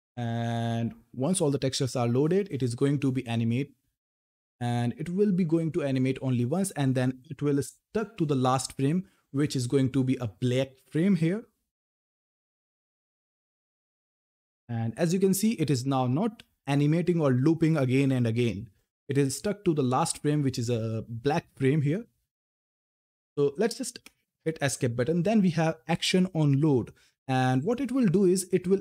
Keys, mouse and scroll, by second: 27.1 click.